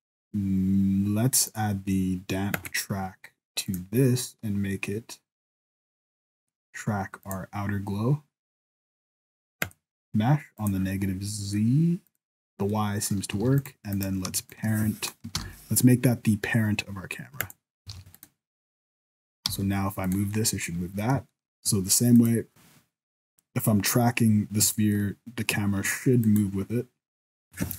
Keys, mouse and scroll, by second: 1.5 click, 3.7 click, 9.6 click, 10.6 click, 12.1 click, 12.7 middle click, 13.4 alt+a, 13.6 right click, 13.9 right click, 14.4 shift+right click, 15.3 ctrl+p, 18.0 alt+a, 18.1 right click, 18.8 right click, 19.2 right click, 19.5 g, 20.3 middle click, 21.3 shift+scroll up 1, 21.3 shift+middle click, 22.2 right click, 24.8 shift+middle click, 26.2 right click.